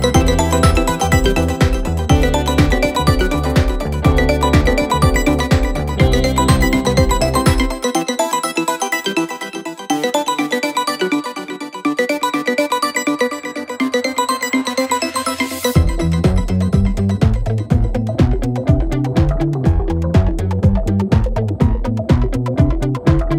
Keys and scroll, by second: 2.1 ], 5.5 ], 6.4 Return, 6.9 Escape, 6.9 ], 11.4 ctrl+z, 14.4 ctrl+z.